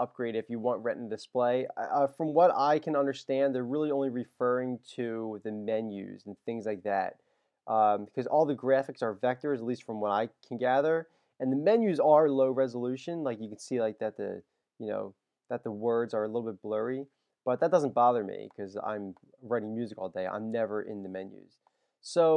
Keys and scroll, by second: 2.7 super+,, 20.4 super+-.